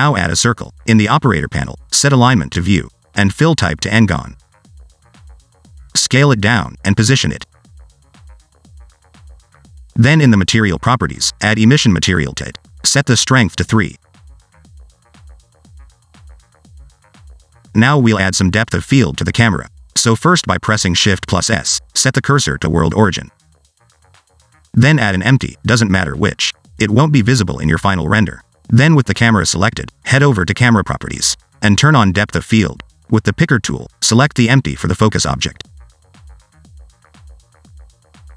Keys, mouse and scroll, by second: 2.1 click, 3.0 click, 4.2 click, 5.7 click, 6.6 s, 7.4 g, 8.4 middle click, 8.8 click, 10.4 scroll up 1, 10.8 click, 11.7 click, 14.0 click, 15.4 click, 16.1 alt+d, 17.7 s, 18.1 click, 18.4 s, 18.8 alt+d, 19.5 s, 19.8 click, 19.8 click, 19.9 click, 20.1 click, 22.4 shift+s, 24.0 shift+a, 26.5 s, 27.5 click, 28.2 s, 29.2-29.7 scroll down 1, 29.9 shift+middle click, 30.1-30.5 scroll up 1, 30.5 middle click, 31.0 click, 33.1-34.0 scroll down 6, 34.0 click, 35.0 click.